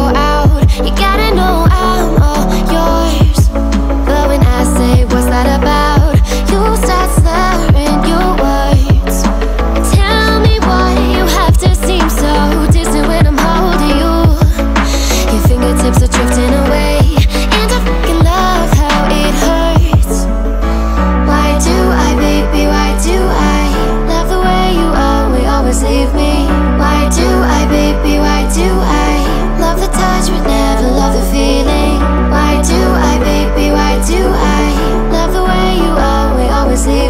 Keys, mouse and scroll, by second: 21.5-25.8 drag, 29.5 drag, 30.3 x, 32.4 ctrl+a, 35.3 click, 36.1 click.